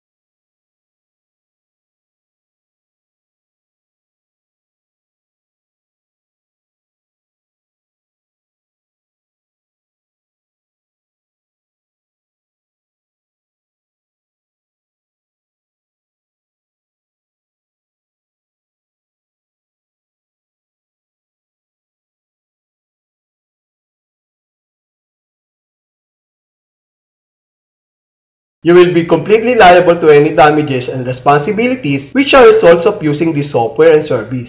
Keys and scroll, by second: 1.0 Page_Down, 2.6 Page_Down, 4.2 Page_Down, 5.9 Page_Down, 7.4 Page_Down, 8.8 Page_Down, 10.1 Page_Down, 11.8 Page_Down, 13.5 Page_Down, 15.1 Page_Down, 16.6 Page_Down, 18.2 Page_Down, 19.9 Page_Down, 21.6 Page_Down, 23.6 alt+n, 25.6 alt+n, 27.6 alt+n.